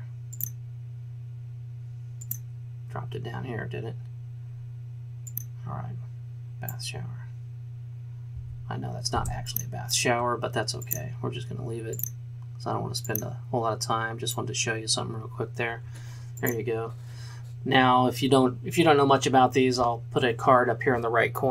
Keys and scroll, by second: 8.5 v, 9.1 space.